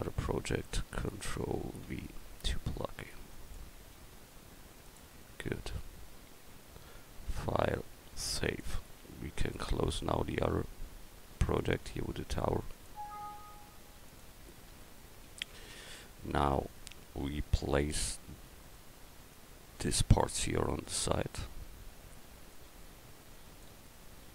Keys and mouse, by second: 2.0 ctrl+v, 4.0 s, 14.8-16.6 middle drag.